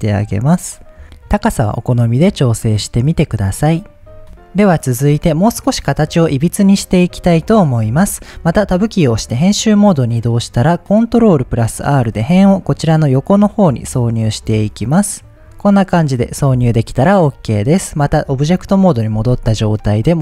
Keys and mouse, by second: 0.3 Tab, 0.7-2.1 middle drag, 1.0 Tab, 2.5-3.6 middle drag, 4.1 middle click, 4.9-6.7 middle drag, 8.3 Tab, 11.7 ctrl+r, 15.4 Tab, 15.4-16.9 middle drag, 17.9 Tab.